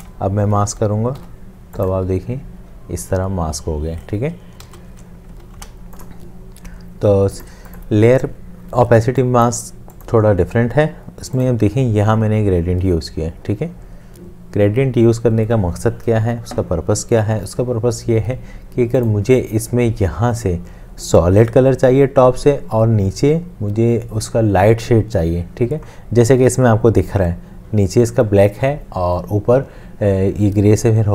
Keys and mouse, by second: 1.2 ctrl+7, 4.6 ctrl+z, 5.3 ctrl+z, 5.6 ctrl+z, 9.1 space.